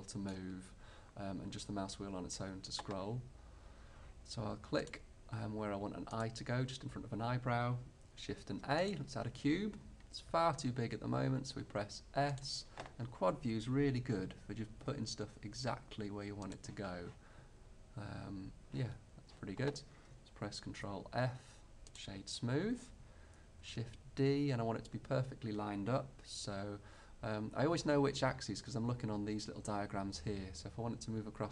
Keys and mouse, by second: 4.9-8.2 drag, 8.3 shift+a, 10.4 s, 13.6 click, 14.9 g, 20.8 ctrl+f, 23.7 shift+d.